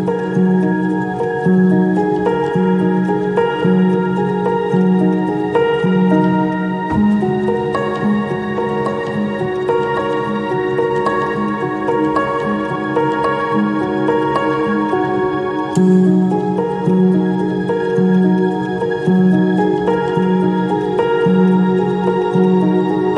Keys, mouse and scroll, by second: 1.2 shift+click, 6.5 ctrl+click, 8.9 ctrl+i, 18.1 ctrl+click, 18.6 ctrl+click, 19.3 shift+click, 22.2 double click.